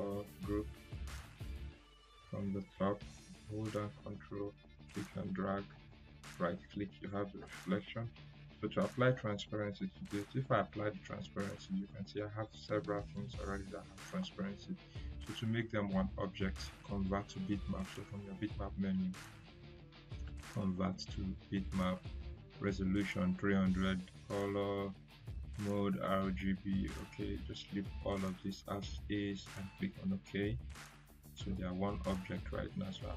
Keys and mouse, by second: 0.0 ctrl+g, 3.3 ctrl+g, 4.0-6.0 drag, 5.7 right click, 10.5 click, 13.1 click, 18.0 click, 29.8 click, 32.8-33.1 drag.